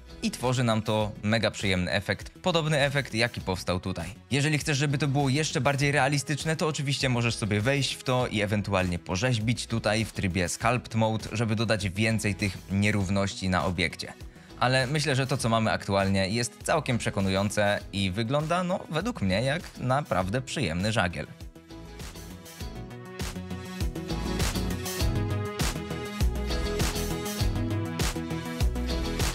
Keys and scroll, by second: 8.8 space, 15.0 shift+Left, 15.1 space.